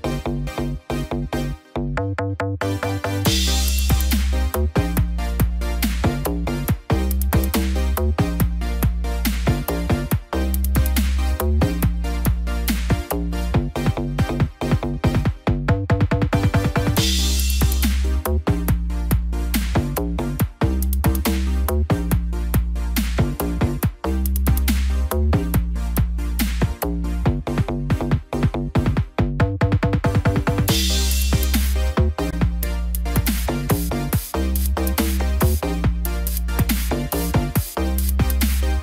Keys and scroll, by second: 16.7 ctrl+t, 30.2 ctrl+t.